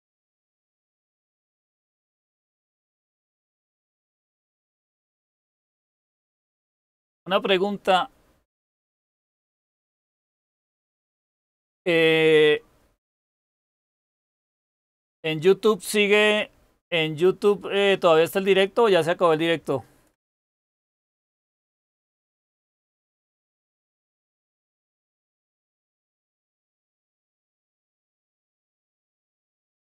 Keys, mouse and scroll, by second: 25.2-29.9 drag.